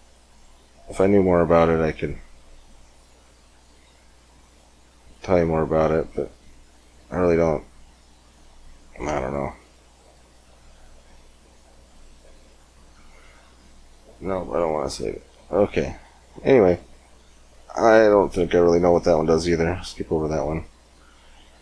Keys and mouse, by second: 9.6-12.8 drag, 14.5-18.9 drag, 18.9-21.6 middle drag.